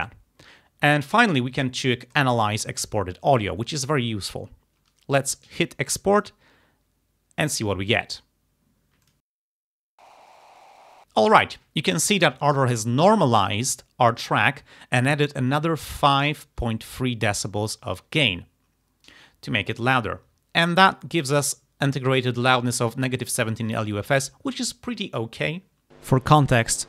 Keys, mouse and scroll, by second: 2.1 click, 9.1 click.